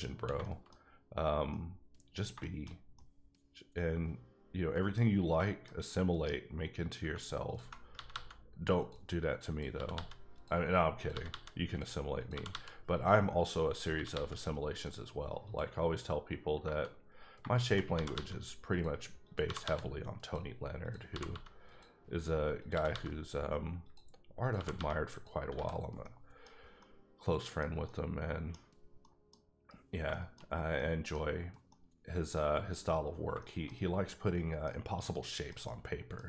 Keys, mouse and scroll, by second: 0.4 shift+middle click, 1.8 middle click, 5.7-6.3 scroll up 3, 6.8 click, 7.2 ctrl+click, 7.9 g, 8.1 g, 8.7 click, 9.5 click, 9.7 g, 9.9 g, 10.3 click, 10.9 click, 11.1 g, 11.2 g, 11.6 click, 12.2 click, 12.3 g, 12.5 g, 12.9 click, 13.7 click, 13.9 g, 14.1 g, 14.7 click, 15.4 click, 17.5 shift+click, 17.9 g, 18.1 g, 18.7 click, 19.4 g, 19.6 g, 20.2 click, 20.8 click, 21.1 g, 21.2 g, 21.7 click, 22.6 click, 22.7 g, 22.9 g, 23.8 click, 24.4 click, 24.5 g, 24.7 g, 25.1 click, 25.5 alt+a, 25.8 scroll down 1, 26.0 middle click, 26.4 scroll down 2, 26.8 middle click, 27.8 middle click, 28.8 scroll down 1, 29.0 middle click, 29.4-29.8 scroll up 2, 30.1 shift+middle click, 30.4 shift+scroll down 2, 30.7 middle click, 31.7 middle click, 33.3 shift+middle click, 33.4 shift+middle click, 33.8 scroll down 2, 34.0 middle click, 35.0 middle click, 35.6 double middle click.